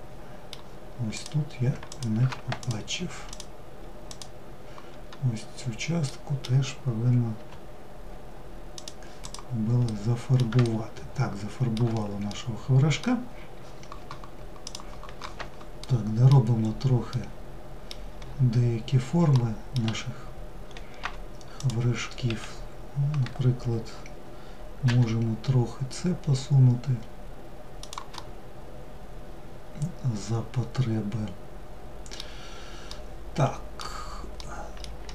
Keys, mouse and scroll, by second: 0.4 click, 1.1 ctrl+click, 1.8 click, 2.5 click, 3.3 click, 5.3-6.6 middle drag, 6.6 g, 8.4 click, 9.1-14.1 middle drag, 15.2 middle click, 16.0-16.4 scroll up 1, 16.6-17.6 middle drag, 17.6-18.8 scroll up 3, 18.8 middle click, 19.3 1, 20.1-20.5 scroll up 2, 20.5 2, 21.0 click, 27.6-30.7 middle drag, 32.3-34.6 middle drag, 34.6 1, 34.9-35.1 middle drag.